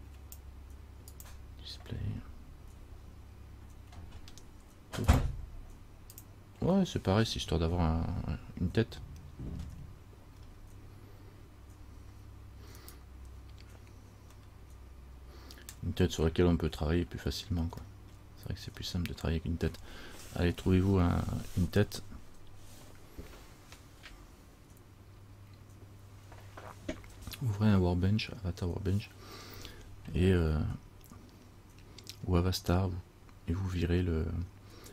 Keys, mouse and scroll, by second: 5.3-6.4 drag, 9.0-10.6 scroll down 1, 10.6-11.4 scroll up 1, 11.4-12.4 scroll up 5, 13.0 right click, 14.6 middle click, 14.6 scroll up 1, 17.7 scroll down 1, 18.1 middle click, 18.1 scroll up 1, 18.3 scroll down 1, 19.0-21.2 scroll down 1, 21.2 scroll down 1.